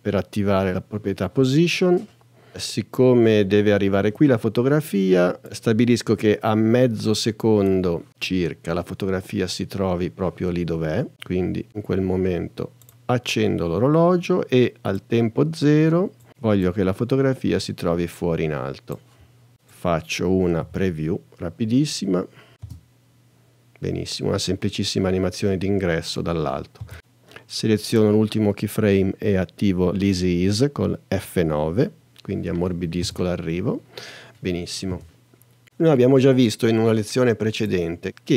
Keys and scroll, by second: 21.0 n, 22.6 space, 31.4 F9, 33.0 space, 34.9 space.